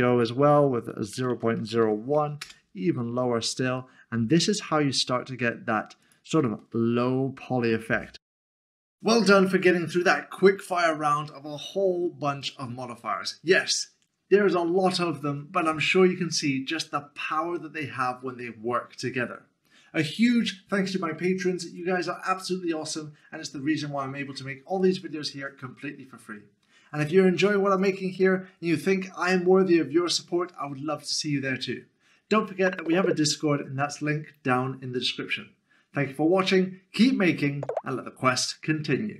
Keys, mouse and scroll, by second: 1.1-1.8 typing, 2.4 Return, 3.8 middle click, 6.0 middle click.